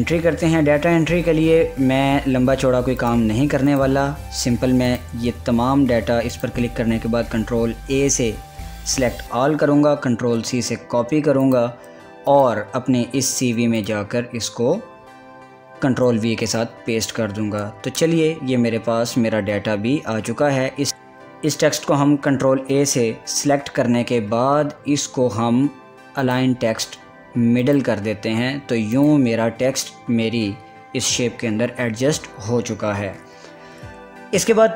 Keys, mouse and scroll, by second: 3.6 click, 4.5 click, 6.9 click, 7.8 ctrl+a, 10.7 ctrl+c, 12.0 click, 12.2 click, 13.2 click, 14.5 click, 16.4 ctrl+v, 20.9 ctrl+a, 29.5 click.